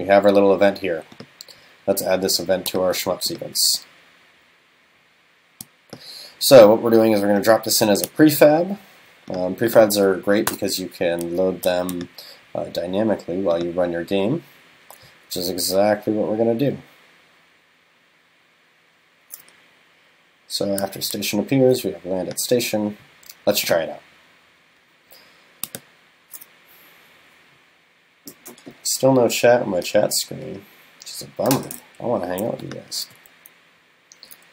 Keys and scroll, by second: 10.5 super+BackSpace.